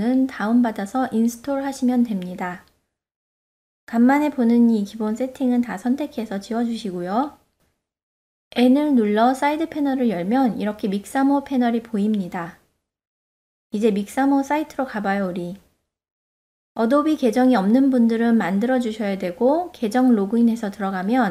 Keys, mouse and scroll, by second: 2.7 click, 4.2 Delete, 5.6-6.3 middle drag, 6.7 ctrl+middle drag, 7.1-7.5 shift+middle drag, 8.5 n, 10.5 click, 15.6 n.